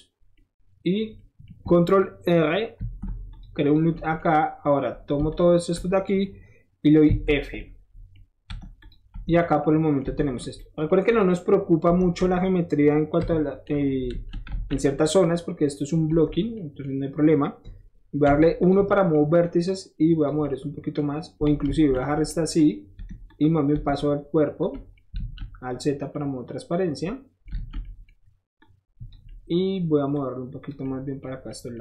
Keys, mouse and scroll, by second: 0.3-1.0 middle drag, 1.2-1.8 middle drag, 2.8 ctrl+r, 3.3 click, 3.6 click, 3.9 middle click, 5.3 alt+click, 7.6-8.8 middle drag, 8.8 click, 9.1 Tab, 9.4-10.0 middle drag, 10.3 click, 11.1 click, 12.2 Tab, 13.2 KP_Divide, 14.1 alt+z, 14.5 alt+z, 16.1 Tab, 18.2 1, 18.6 click, 19.7 click, 20.3 typing, 20.4 middle click, 21.6 ctrl+z, 22.0 middle click, 22.6 click, 22.9 Tab, 23.3 click, 24.7 middle click, 25.1 alt+z, 25.7 click, 26.1-27.5 middle drag, 27.5 alt+z, 27.8 middle click, 28.6 click, 29.3 scroll up 1, 30.2 click, 30.8-31.2 scroll up 1, 31.5 scroll up 1.